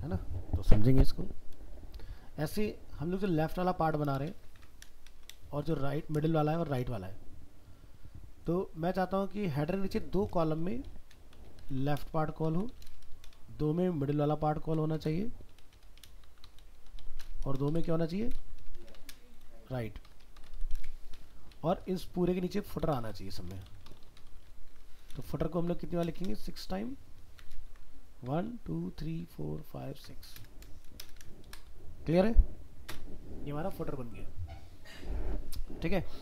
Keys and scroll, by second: 4.5 ctrl+c, 5.6 ctrl+v, 27.7 ctrl+c, 28.4 ctrl+v.